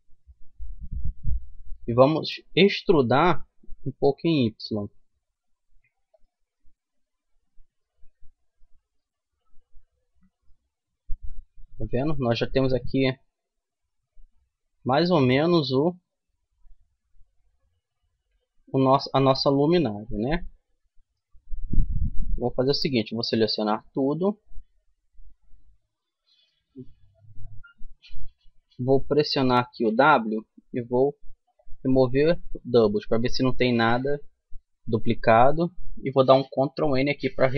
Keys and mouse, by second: 2.9 e, 6.6 middle click, 7.4 middle click, 8.0 Tab, 9.0 Tab, 10.0 z, 16.1-17.9 middle drag, 19.3-20.4 middle drag, 21.5 Tab, 22.0 Tab, 23.3 a, 23.7 a, 26.0 w, 36.7 ctrl+n.